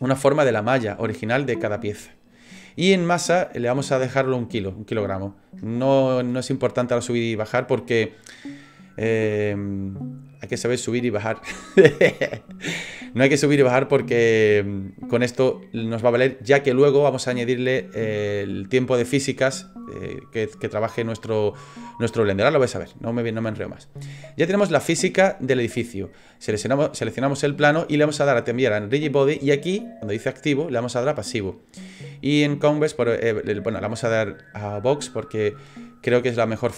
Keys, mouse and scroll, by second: 26.4 right click, 28.7 click, 29.9 click.